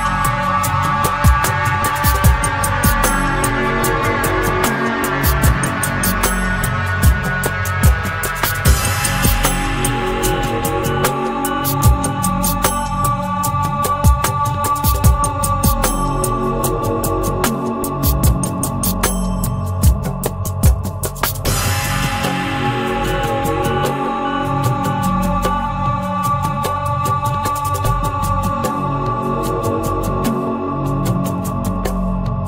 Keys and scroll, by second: 6.7 Return, 21.5 Return.